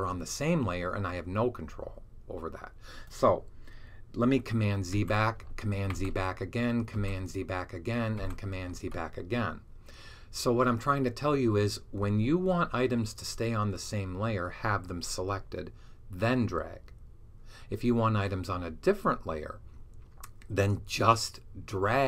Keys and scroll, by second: 4.8 super+z, 5.8 alt+super+z, 6.8 z, 8.0 z.